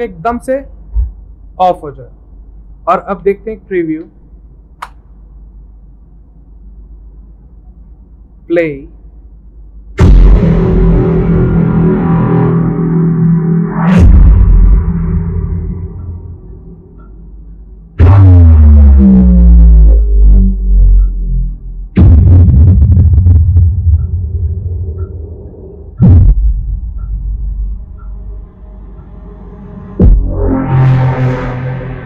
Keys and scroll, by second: 4.9 Return.